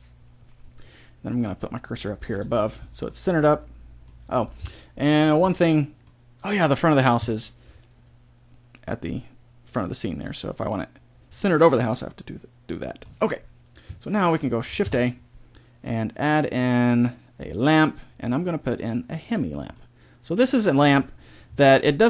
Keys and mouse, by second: 1.9-3.0 drag, 3.0-7.2 middle drag, 7.2 KP_7, 11.2 click, 11.8-13.0 middle drag, 13.0 click, 14.8 shift+a, 19.7-22.0 middle drag.